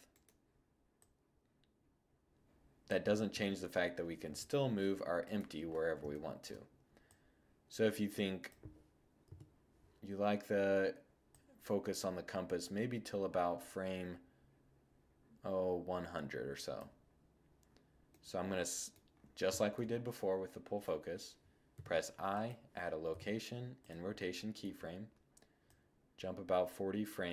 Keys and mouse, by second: 0.1-1.9 drag, 2.4 2, 3.2 1, 4.2-8.3 drag, 8.3 0, 10.3-12.2 drag, 17.1-17.4 middle drag, 18.7 middle drag, 19.0 middle click, 20.8 i, 22.1 i.